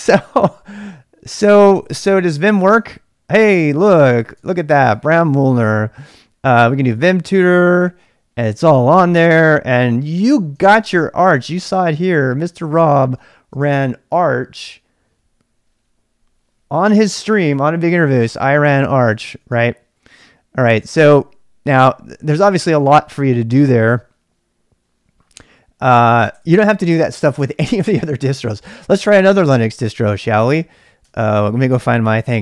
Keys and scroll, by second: 1.8-3.3 typing, 4.0 ctrl+c, 4.4 ctrl+[, 4.6-7.5 typing, 7.8 Return, 9.8 q, 10.7 ctrl+c, 11.6 Return, 12.4-13.7 typing, 17.0 typing, 19.0-20.2 typing, 26.5 Return, 31.0 ctrl+[, 31.2 k, 31.3 k.